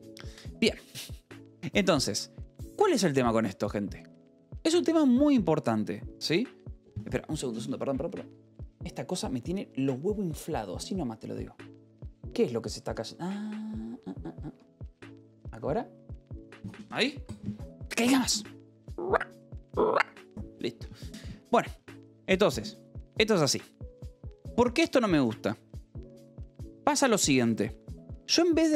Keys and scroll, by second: 24.8-27.5 typing.